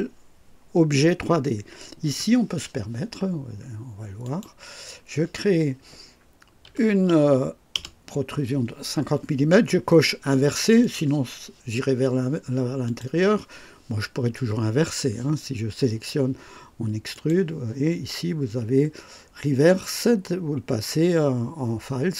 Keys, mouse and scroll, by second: 4.2 click, 6.6 KP_5, 7.7 KP_0, 10.7 click, 12.8 click, 17.1 click.